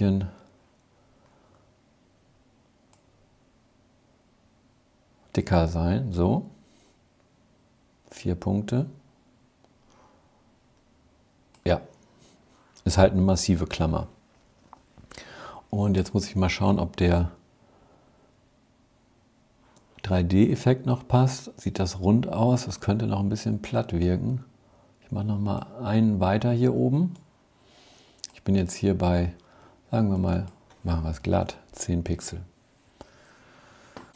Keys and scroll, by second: 33.8 super+-.